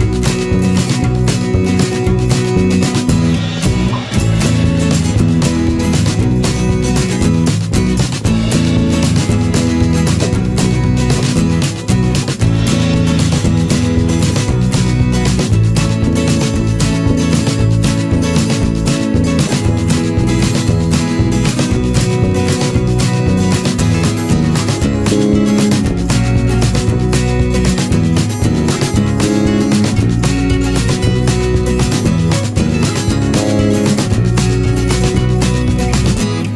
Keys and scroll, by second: 1.2 ctrl+=, 11.2 ctrl+-, 23.3 ctrl+z, 34.2 ctrl+-, 35.1 ctrl+z.